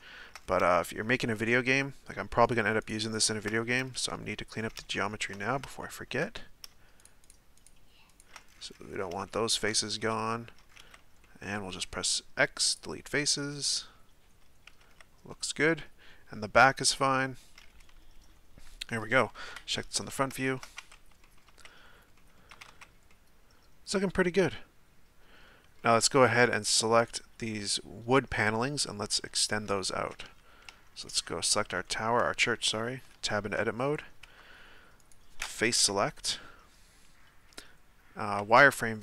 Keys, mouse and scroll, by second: 0.4-0.7 scroll up 4, 0.7-2.4 shift+middle drag, 2.4 shift+right click, 2.8 shift+right click, 3.1 shift+right click, 3.5-4.3 scroll down 1, 4.6-4.9 scroll down 3, 4.9-5.4 shift+middle drag, 5.4-5.8 scroll up 1, 5.8-6.4 shift+middle drag, 6.4-7.0 scroll up 1, 7.0 shift+right click, 7.2 shift+right click, 7.6 shift+right click, 8.1 shift+right click, 8.5-9.3 scroll down 10, 9.3-10.8 shift+middle drag, 10.8 z, 11.2 middle click, 11.5 x, 13.4-15.0 middle drag, 15.0 z, 15.3-18.0 middle drag, 18.0-18.9 scroll down 1, 18.9-19.5 middle drag, 19.5 KP_1, 20.4-20.8 shift+middle drag, 20.8 Tab, 21.2 middle drag, 21.5 z, 22.2 middle click, 22.5 a, 22.7 a, 23.1-26.5 middle drag, 26.5 right click, 28.3-29.2 scroll up 2, 29.2-30.2 middle drag, 30.2 Tab, 30.7 Tab, 31.0 right click, 31.4-31.8 scroll down 1, 31.8-33.1 shift+middle drag, 33.1 Tab, 33.8-35.0 scroll up 1, 35.0 right click, 35.8 KP_1, 38.4 z.